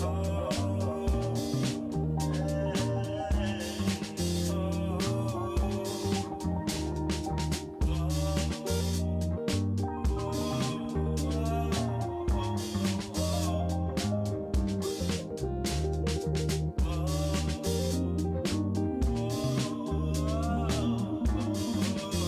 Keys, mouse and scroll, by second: 1.2-2.1 middle drag, 2.1 Tab, 2.4 middle click, 2.7 2, 4.0 KP_1, 4.6 g, 6.2 1, 8.0 click, 8.8 w, 9.4 w, 10.0-10.5 drag, 10.7 g, 13.4 click, 15.7 click, 17.4 click, 18.3 g, 20.3 click, 21.0 g.